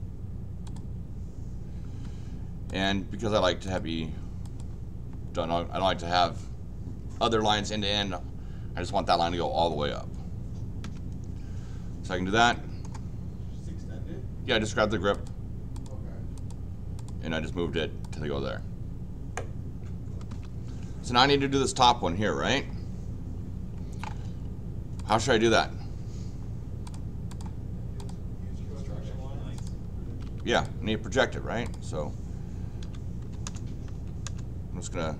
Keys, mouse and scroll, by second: 0.6 click, 2.0 Escape, 2.7 click, 3.6 click, 4.4 click, 10.8 Escape, 12.5 middle click, 15.1 click, 15.7 click, 16.3 click, 16.9 click, 18.0 click, 20.3 Escape, 25.0 click, 26.9 click, 27.3 click, 28.0 click, 29.6 click, 30.1 Escape, 30.2 Escape, 30.5 click, 31.6 click, 32.8 x, 33.2 l, 33.4 Return, 33.9 v, 34.2 Return.